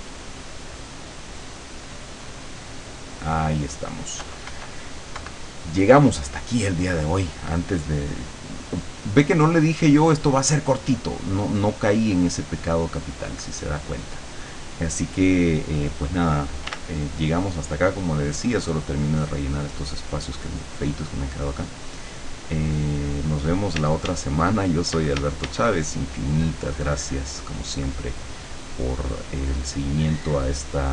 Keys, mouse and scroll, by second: 2.4 click, 4.2 KP_Subtract, 8.3 click, 9.1 middle click, 9.6 click, 10.6-11.6 drag, 12.1 click, 12.3-13.8 middle drag, 16.7 w, 17.5-22.5 drag, 23.8 d, 24.2-25.8 drag, 25.0 d, 25.9-27.8 drag, 28.0-30.3 drag, 30.8 click.